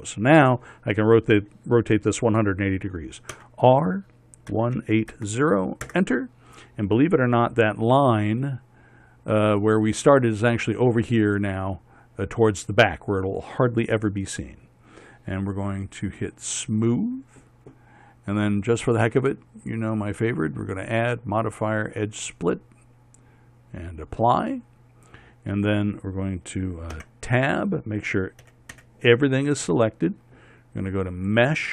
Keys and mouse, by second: 3.9 r, 17.0-18.9 drag, 24.7-27.5 drag, 27.5 Tab, 29.0 a, 29.3 a.